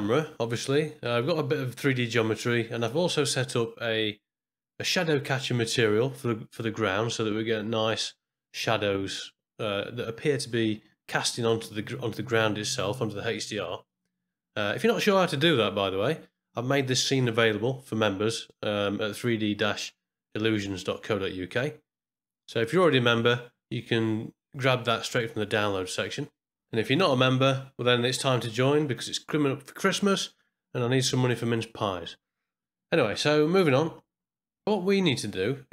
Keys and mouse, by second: 0.2 middle click, 0.7 ctrl+middle click, 1.0 shift+middle click, 1.5-2.8 middle drag, 4.4-5.0 middle drag, 29.9-31.0 middle drag.